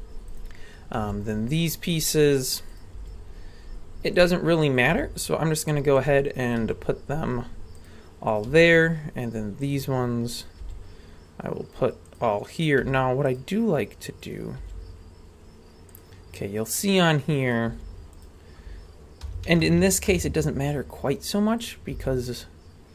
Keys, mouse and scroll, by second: 0.3 right click, 1.0 g, 2.7 right click, 3.0 g, 4.8 right click, 4.9 g, 6.5 right click, 6.6 g, 8.3 right click, 8.5 g, 10.4 right click, 10.6 g, 12.8 g, 14.2 right click, 14.6 g, 16.4-17.5 scroll up 1, 17.5 right click, 17.5 scroll up 1, 17.7 g, 19.2 r, 20.7-21.6 scroll down 2, 21.6 right click, 21.9 g.